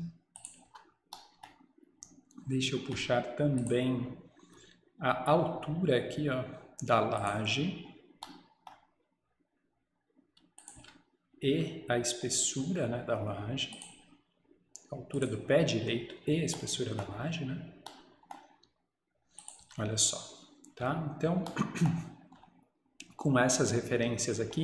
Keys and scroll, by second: 0.7 Escape, 10.8 Escape, 11.9 Escape, 19.7 Escape.